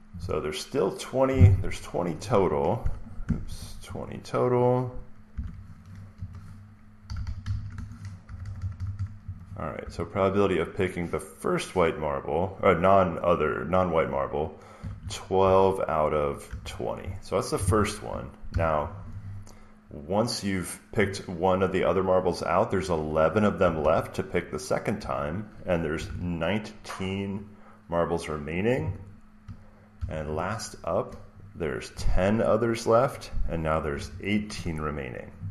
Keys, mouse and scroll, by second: 2.0 click, 3.1 Escape, 3.3 Escape, 3.9 click, 5.0-7.9 typing, 8.2 Left, 8.3 Left, 8.5 Left, 8.6 Left, 8.8 Left, 9.1 Right, 9.5-10.4 typing, 14.4-16.8 typing, 18.1-19.0 typing, 23.5 typing, 24.9-26.4 typing, 29.9 typing, 31.6-34.4 typing.